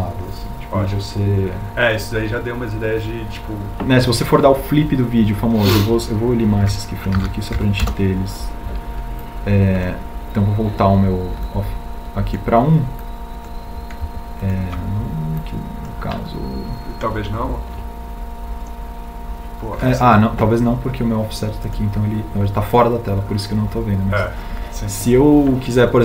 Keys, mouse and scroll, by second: 6.9 a, 8.2 Delete.